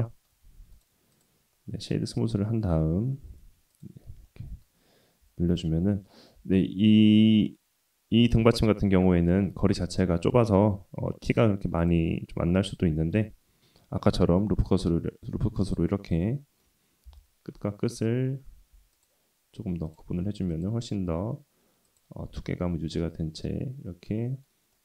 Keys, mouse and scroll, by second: 0.0 middle click, 0.7 click, 0.7 right click, 1.5-2.6 middle drag, 3.7 click, 4.2-4.6 middle drag, 5.2 Tab, 5.7 middle click, 6.3 Tab, 8.2 Tab, 9.0 middle click, 10.5 click, 11.1 ctrl+r, 14.4 ctrl+r, 16.0 middle click, 17.1 /, 17.8-18.4 scroll up 2, 18.6 ctrl+r, 20.2 ctrl+r, 22.3 Tab, 22.8-24.5 middle drag, 24.7-24.8 middle drag.